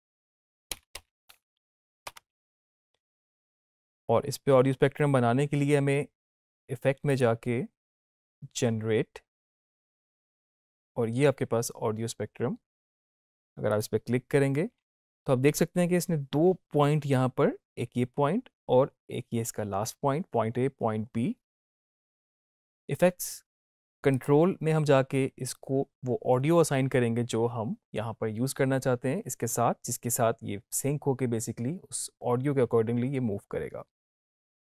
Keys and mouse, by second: 0.0-1.1 typing, 2.0 Return, 7.0 click, 13.6 click, 24.1 click.